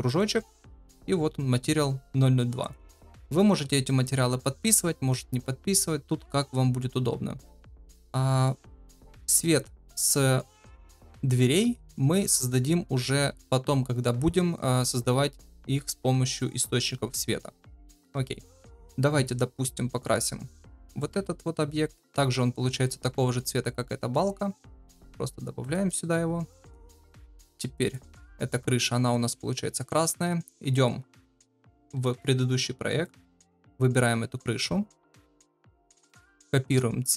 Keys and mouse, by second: 0.1-2.7 drag, 7.4-7.9 middle drag, 8.4 shift+middle drag, 18.3 middle click, 24.7-25.7 drag, 27.8 click.